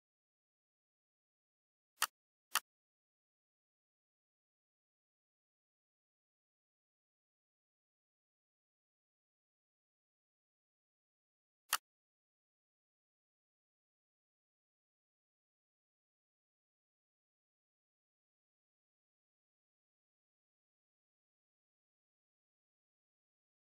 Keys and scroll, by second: 4.1 F4, 7.1 ctrl+a, 8.9 p, 10.5 F4.